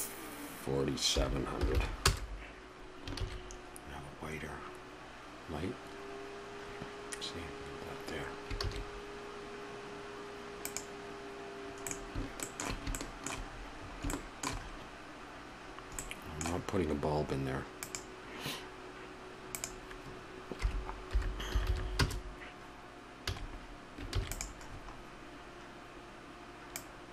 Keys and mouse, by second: 2.9 0, 3.5 shift+z, 8.4 shift+z, 26.8 ctrl+s.